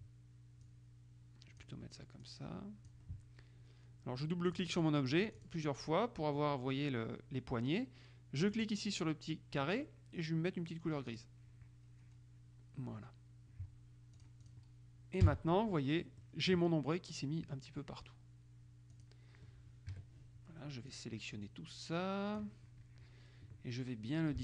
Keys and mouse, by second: 0.8-2.2 drag, 2.4-3.5 drag, 4.6-6.1 drag, 8.6 click, 11.2 click, 14.3 click, 15.4 KP_5, 16.3 middle click, 19.1 click, 20.1 KP_Subtract, 21.1-23.0 drag.